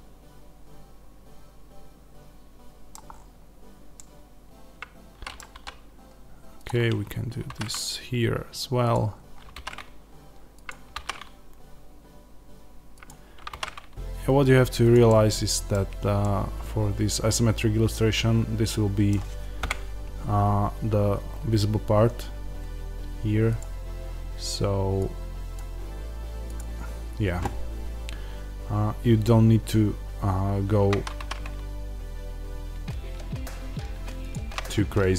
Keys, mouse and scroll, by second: 2.8 scroll down 1, 3.0-3.9 scroll up 2, 5.4 r, 6.5 click, 6.7-7.4 scroll down 2, 7.4 alt+d, 8.8 click, 9.0-9.4 scroll down 1, 9.4 alt+d, 10.6 click, 10.9 alt+d, 13.0 click, 13.4 alt+d, 14.8 click, 15.0-24.9 middle drag, 15.6-16.1 scroll down 1, 19.5 KP_0, 21.2-24.8 scroll up 1, 24.9-27.8 drag, 27.8-30.1 scroll up 1, 31.1 alt+d, 34.2 click.